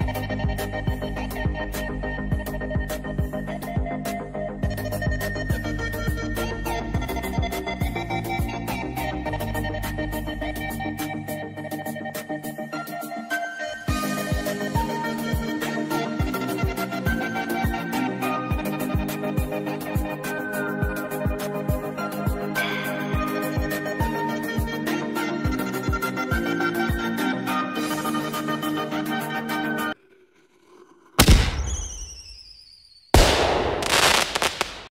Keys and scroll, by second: 0.0-3.5 typing, 1.0 Return, 4.6-7.2 typing, 8.4 BackSpace, 9.3 i, 9.6 b, 10.1 space, 13.8 Return, 14.3-19.5 typing, 21.3 Return, 22.9 shift+,, 23.7 shift+., 23.9 shift+,, 24.1 shift+., 26.2 shift+,, 28.0 shift+..